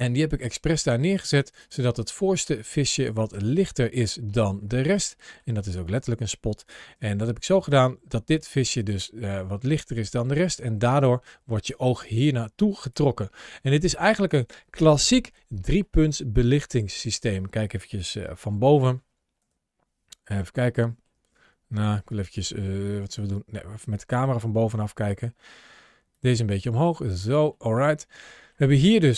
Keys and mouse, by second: 1.4 click, 1.8 click, 3.2 shift+middle click, 3.6 middle click, 4.7 shift+middle click, 5.0 middle click, 5.7 click, 6.8 g, 7.5 click, 8.6 click, 9.1-10.1 middle drag, 11.3 ctrl+shift+a, 14.0-15.1 middle drag, 15.7-16.7 middle drag, 17.9 middle click, 18.4 shift+middle click, 19.2 KP_7, 20.5 shift+middle click, 21.7-23.9 middle drag, 24.2 shift+middle click, 26.1 click, 27.4 shift+middle click, 28.2 shift+middle click, 28.7 click.